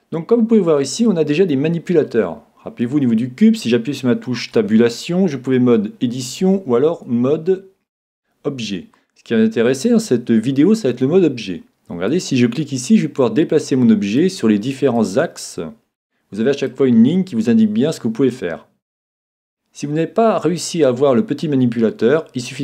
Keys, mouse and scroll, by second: 0.0-1.8 middle drag, 4.5 Tab, 6.4 Tab, 12.1 click, 14.9 click, 17.4 click.